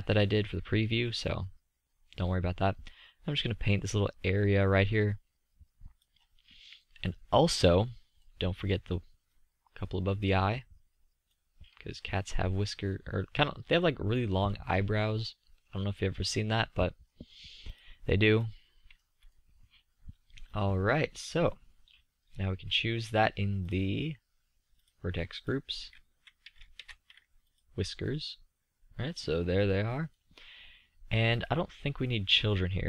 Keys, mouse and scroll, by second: 2.4-3.3 drag, 3.9-8.1 middle drag, 12.1 middle click, 15.6-16.2 middle drag, 28.2-29.1 scroll up 1, 29.1 scroll up 1, 29.5-30.1 middle drag, 30.6-31.2 middle drag, 32.6-32.8 drag.